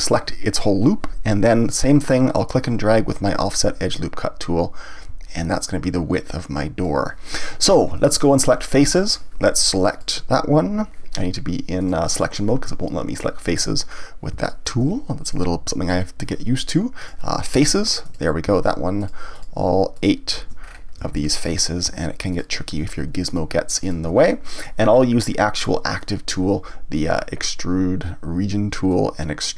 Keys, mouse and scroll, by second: 3.9-7.0 drag, 8.9 click, 9.9 click, 11.8 click, 13.9-14.5 scroll up 1, 14.5 shift+middle click, 15.2 click, 17.0 click, 18.0 click, 18.6 shift+click, 19.0 shift+click, 19.3 shift+click, 19.9 shift+click, 20.6 scroll up 1, 20.9 scroll down 1, 21.1-22.3 shift+middle drag, 22.3 shift+click, 23.3 shift+click, 23.8 shift+click, 24.3-26.0 middle drag, 26.0 click, 28.0-28.9 scroll down 1, 28.9-29.5 drag.